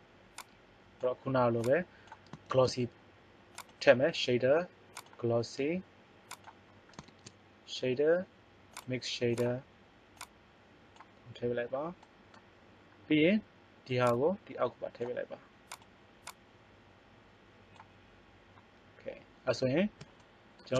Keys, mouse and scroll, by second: 0.3 right click, 2.5 shift+a, 6.9 shift+a, 8.6 click, 11.1-12.2 right drag, 14.5 click.